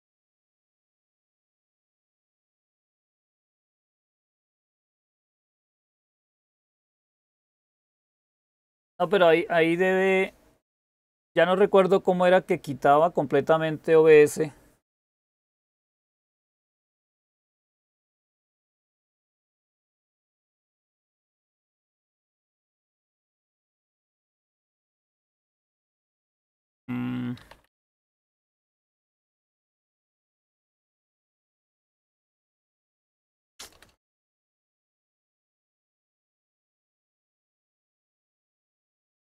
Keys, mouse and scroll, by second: 1.2-4.1 typing, 16.5-17.6 typing, 27.0-39.1 typing.